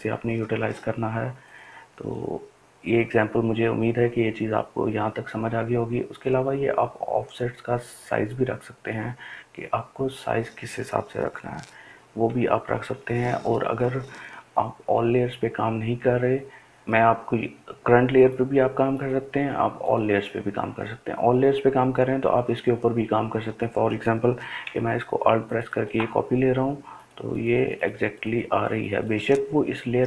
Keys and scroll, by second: 13.6 ], 13.9 ].